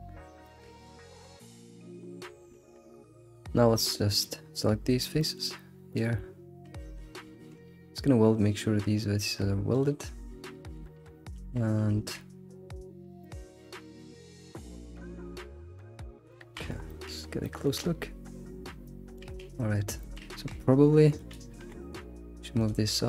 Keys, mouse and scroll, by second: 0.4 shift+middle click, 0.7-1.4 scroll down 5, 2.1 scroll up 2, 2.6 Tab, 2.9 click, 3.3 shift+click, 3.7 shift+click, 4.2 click, 5.0 scroll down 1, 5.2 shift+middle click, 5.9 shift+click, 7.3 ctrl+shift+w, 9.2 Tab, 9.7 click, 10.8 alt+shift+z, 11.3 alt+shift+z, 11.9 alt+x, 13.2 shift+middle click, 13.6 scroll up 3, 14.4-15.3 shift+middle drag, 15.3 scroll up 2, 15.8-16.3 scroll down 6, 16.3 shift+middle click, 16.6-17.3 scroll up 7, 16.9 shift+middle click, 17.4-19.3 shift+middle drag, 19.3-19.9 scroll down 4, 20.0 shift+middle drag, 20.4 Tab, 20.5-21.2 scroll up 4, 21.2 click, 21.3 click, 21.6 g, 22.9 click.